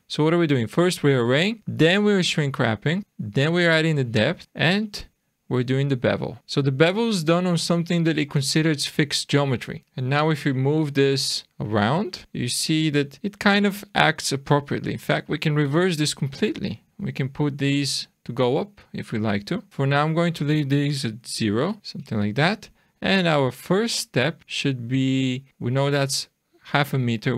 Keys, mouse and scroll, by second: 1.6 click, 3.0 click, 5.5 click, 6.2 click, 6.4 click, 6.5 click, 10.5 click, 12.2 click, 15.3-16.4 scroll down 2, 16.4 shift+middle click, 17.5 shift+scroll down 1, 18.2 click, 20.2 click, 21.8 shift+middle click, 22.4 click, 23.5-24.2 scroll up 3, 24.2 middle click, 25.5 scroll down 1.